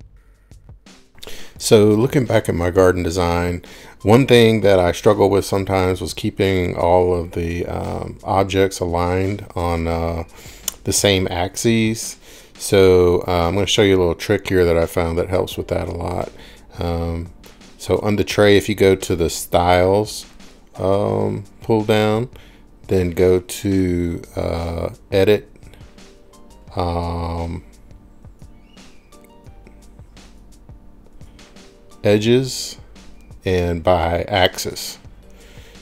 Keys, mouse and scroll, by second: 4.8 click, 8.5 click, 9.5-10.6 scroll, 10.8 click, 11.0-13.0 scroll, 13.8 scroll, 16.2 middle click, 20.0 scroll, 20.5-21.8 drag, 22.9 click, 25.6-27.1 middle drag, 27.1 click, 28.3 click, 28.8 click, 29.0-30.8 drag, 32.4 click, 34.1 click.